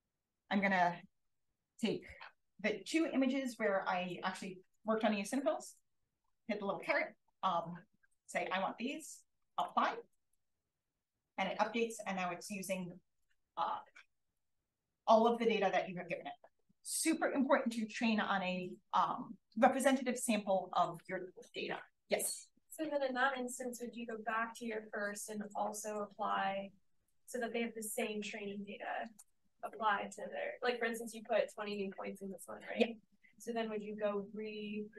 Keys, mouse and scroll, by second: 0.0-5.7 drag, 6.2 click.